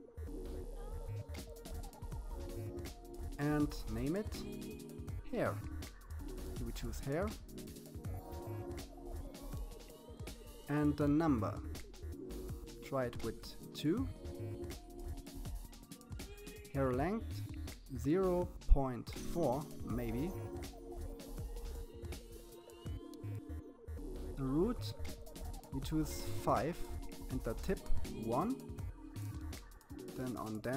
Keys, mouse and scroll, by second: 0.2 click, 9.9-11.4 drag, 15.4-16.9 drag, 19.3-21.4 scroll down 15, 21.4-22.5 scroll down 3, 22.5-24.0 drag, 25.3-26.9 drag, 28.3 scroll down 1, 28.4 click, 29.2-30.7 drag.